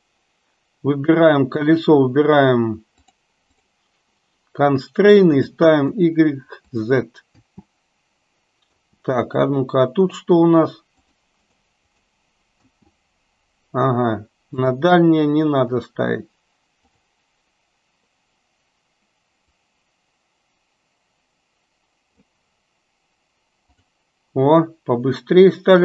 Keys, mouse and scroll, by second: 3.5 click, 5.4 click, 5.9-6.3 drag, 6.8 click, 7.4 space, 8.9 space, 9.4 click, 11.1 drag, 11.5 click, 12.1 click, 12.5 space, 14.7 click, 15.7 click, 16.9 click, 19.7-22.3 drag, 23.7 click.